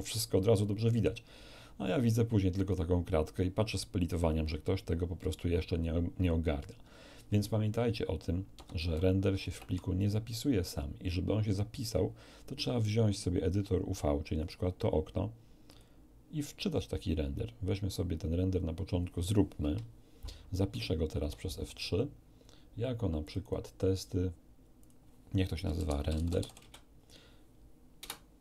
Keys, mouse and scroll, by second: 8.5 Escape, 9.4 shift+space, 14.4 scroll up 2, 14.5 scroll down 2, 15.6 click, 19.6 F12, 21.2 F3, 23.2 click, 24.8 click, 25.6-26.4 typing, 26.6 Return, 28.0 Return.